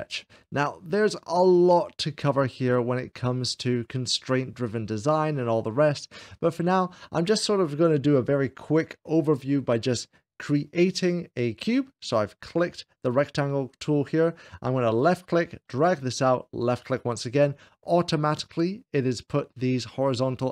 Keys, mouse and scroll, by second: 2.5-4.9 middle drag, 10.3-11.3 drag, 14.7-15.7 drag, 16.5 click, 20.3-20.5 middle drag.